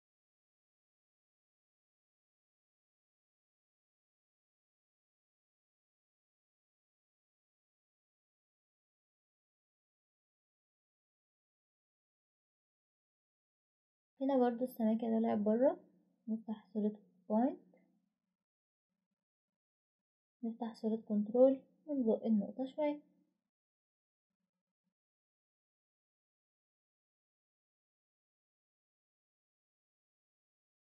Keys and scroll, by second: 7.9 ctrl+alt+s, 15.1 typing.